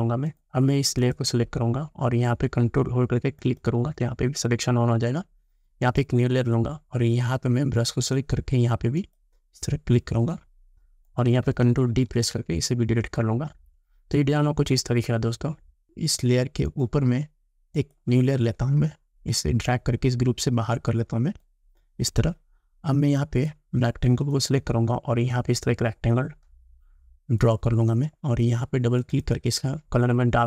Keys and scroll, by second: 12.1 ctrl+d.